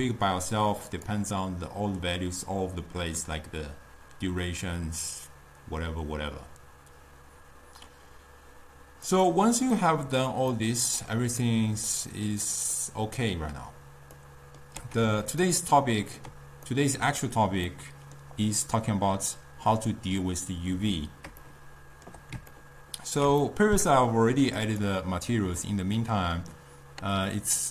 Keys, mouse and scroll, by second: 1.0-4.1 drag, 9.3 click, 9.9-15.0 middle drag, 15.0-15.5 scroll up 2, 15.5 scroll down 2, 15.5-16.7 ctrl+middle drag, 16.7-17.4 scroll down 2, 17.4-20.8 middle drag, 21.5-24.7 shift+middle drag, 24.7 click.